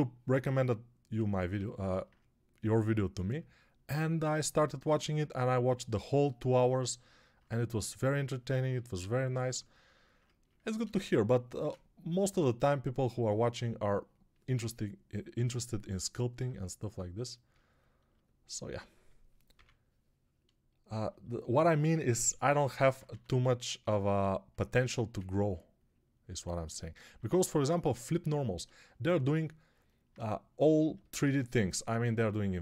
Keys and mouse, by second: 19.4 p, 22.3 alt+q, 23.0 x, 24.7 1, 31.1 1.